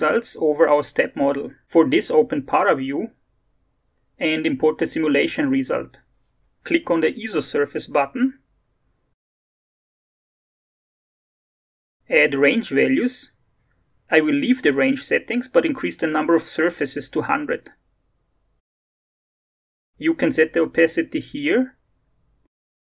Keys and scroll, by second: 12.2 alt+Tab, 15.8 0, 22.4-22.8 typing.